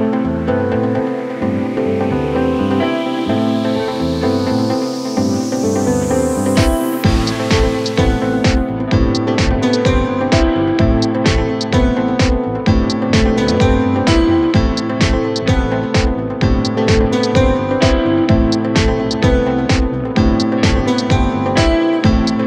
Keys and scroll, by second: 2.8 Delete.